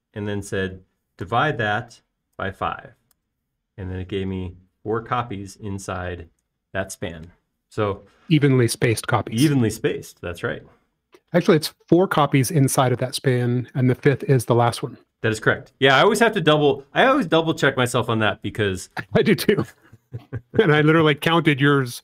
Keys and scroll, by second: 2.5-3.9 typing, 4.2 Return, 9.6 space, 16.8 BackSpace.